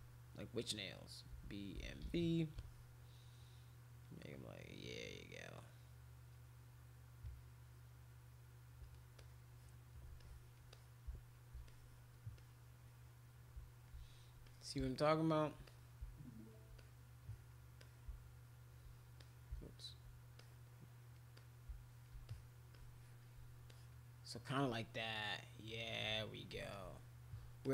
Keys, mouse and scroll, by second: 1.1-2.5 typing, 2.5 click, 4.0 click, 5.5 click, 7.2-8.8 drag, 9.2 click, 10.2 alt+click, 10.7 click, 11.6 alt+click, 12.3-13.8 drag, 14.4 click, 15.6 click, 16.7 click, 17.8 shift+click, 19.2 click, 20.3 click, 21.3 click, 22.3 alt+click, 22.7 alt+click, 23.7 alt+click, 24.7-26.4 drag, 26.7 alt+click, 27.6 alt+click.